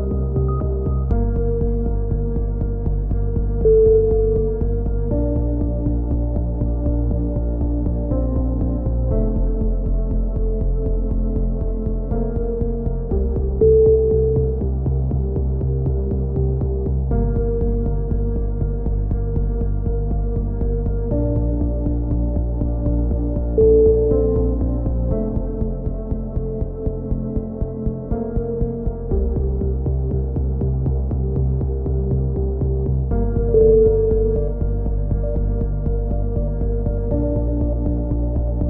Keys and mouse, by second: 3.1 Tab, 4.6 middle click, 5.2 ctrl+r, 6.1 z, 6.4 z, 6.9 c, 8.4-9.6 drag, 8.7 right click, 10.9 a, 11.5 c, 13.1 right click, 13.8 click, 15.4 a, 17.0 middle click, 17.9 ctrl+r, 19.9 click, 20.5 g, 22.7 a, 23.0 c, 23.8-25.4 drag, 26.8 a, 26.9 z, 27.0 Tab, 27.8 click, 29.6 KP_3, 29.8 z, 30.0 click, 31.7 KP_7, 32.6 z, 32.9 Tab, 33.1-34.5 drag, 34.5 right click, 34.6 KP_7, 35.0 z, 36.5-38.6 drag.